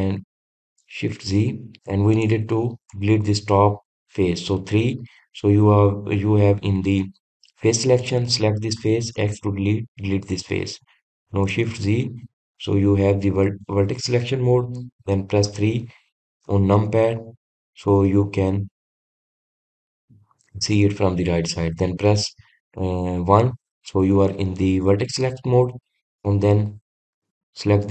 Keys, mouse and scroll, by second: 2.3 shift+z, 3.4 click, 4.1 click, 6.3 3, 9.2 click, 12.9 shift+z, 16.7 KP_3, 18.4-19.4 scroll up 2, 19.5-20.5 shift+middle drag, 20.5-23.5 scroll up 1, 27.5 click.